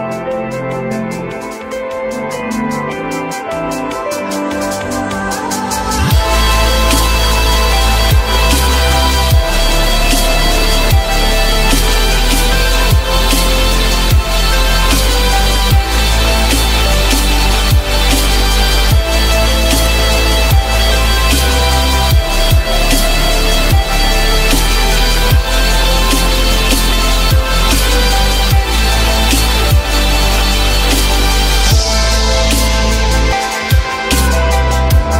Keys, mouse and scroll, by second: 4.4 alt+middle click, 4.9 alt+middle click, 5.1 alt+middle click, 6.7 1, 8.9 ctrl+click, 10.9 ctrl+click, 11.7 ctrl+shift+e, 12.8 alt+middle click, 14.8 alt+middle click, 16.3 alt+middle click, 18.3 ctrl+click, 19.1 ctrl+shift+e, 19.8 alt+middle click, 20.5 alt+scroll down 1, 27.1 shift+click, 28.7 alt+middle click, 29.1 alt+middle click, 33.5 alt+middle click, 34.1 alt+middle click, 34.4 alt+double middle click, 34.8 alt+click.